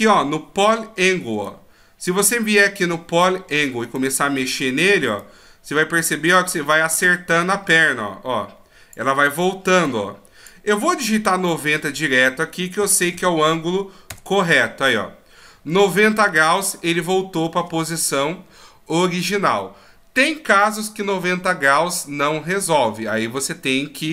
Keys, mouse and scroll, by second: 3.3 click, 5.2 click, 7.7 click, 11.5 click, 15.7 middle click.